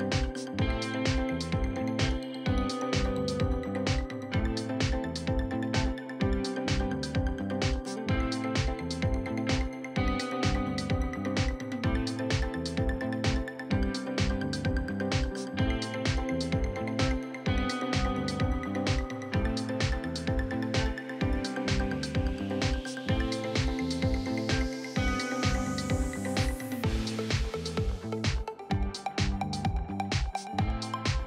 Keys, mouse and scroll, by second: 1.1-1.4 scroll up 2, 2.6-8.7 drag, 8.7-9.9 scroll down 10, 11.4-12.6 drag, 12.6-13.0 scroll down 1, 13.0 KP_3, 13.5-16.2 right drag, 16.2 click, 16.9-18.2 scroll up 2, 18.2-21.3 shift+right drag, 23.7 click, 23.9 scroll down 1, 25.8-26.9 drag.